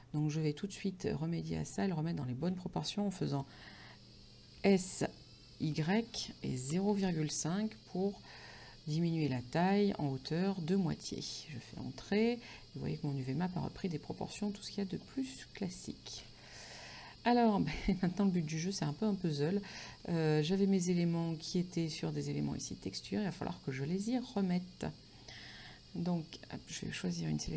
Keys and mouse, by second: 4.7 s, 5.7 y, 6.7 KP_0, 6.8 KP_Decimal, 11.3 Return, 18.3 click, 19.7 middle click, 22.9 right click, 24.0 middle click.